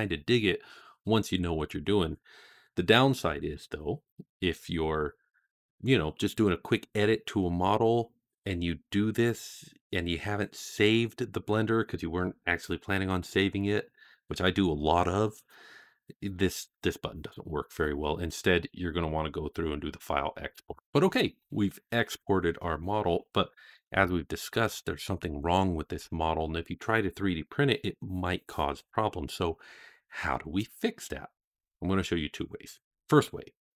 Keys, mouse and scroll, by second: 23.6 KP_Divide, 24.6-24.9 middle drag, 25.9-26.6 scroll up 2.